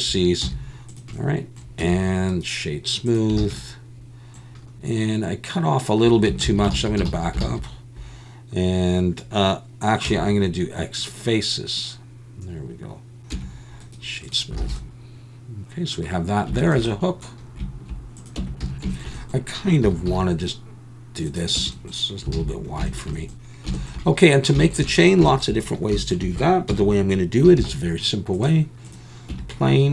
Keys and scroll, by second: 0.4 z, 1.8 Tab, 3.4 alt+a, 6.5 ctrl+z, 6.7 ctrl+z, 7.1 ctrl+z, 7.5 ctrl+z, 10.1 x, 13.3 Tab, 14.7 alt+a, 18.4 Tab, 18.6 a, 19.8 s, 20.1 x, 21.6 Tab, 22.4 alt+a, 26.7 KP_1, 27.6 shift+a, 29.3 Tab.